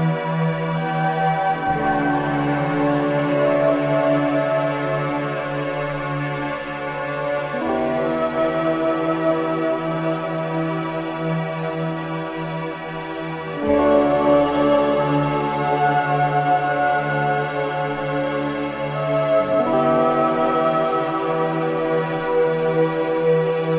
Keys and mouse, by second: 0.8 s, 3.3 s, 7.3 g, 16.4 Tab, 18.4 ctrl+r, 21.2 click.